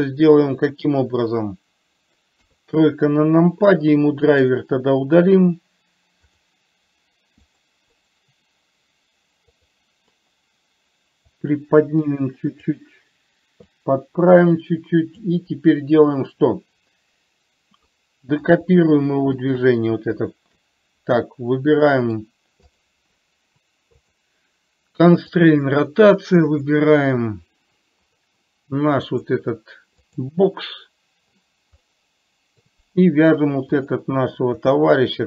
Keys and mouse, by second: 0.2-0.9 middle drag, 2.7 KP_3, 5.7-11.8 right drag, 11.8-13.1 drag, 14.2-15.6 drag, 18.2 middle click, 19.8 shift+click, 22.2 middle click, 24.4-25.9 drag, 26.9-28.6 drag, 29.3 click, 32.2 middle click.